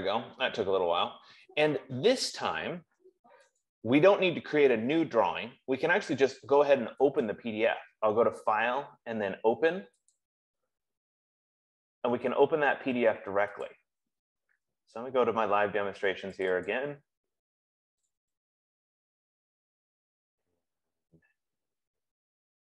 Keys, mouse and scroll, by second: 4.0 click, 7.9 click, 10.5 click, 13.9 click, 16.9 click, 17.1 click, 18.5 click, 18.9 click.